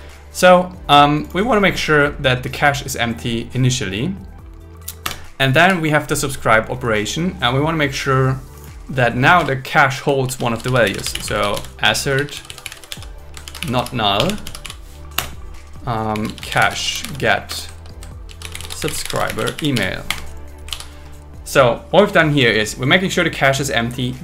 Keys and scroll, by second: 5.0 Return, 5.6 Down, 9.4 Return, 10.3 shift+a, 11.1 shift+a, 13.4 shift+n, 14.2 BackSpace, 15.1 Return, 17.5 Return, 20.3 Escape, 20.9 super+s.